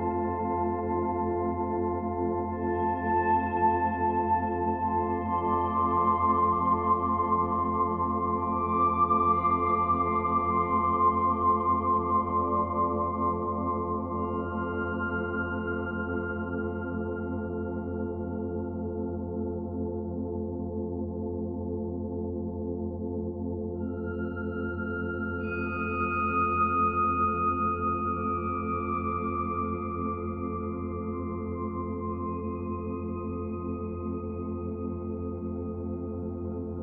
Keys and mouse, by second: 0.5 click, 3.1 click, 3.6 alt+shift+click, 4.0 alt+click, 4.8 click, 5.7 1, 6.9 g, 9.6 Page_Down, 9.7 Page_Down, 10.0 Page_Down, 10.2 Page_Down, 13.1 click, 16.4 click, 18.0-19.1 typing, 19.7 click, 20.8-21.7 drag, 22.4-23.5 drag, 24.2 click, 25.1 click, 26.9 typing, 28.5 click, 29.2 typing, 31.7 click, 32.6 click, 33.7-34.1 typing, 35.7-36.4 typing.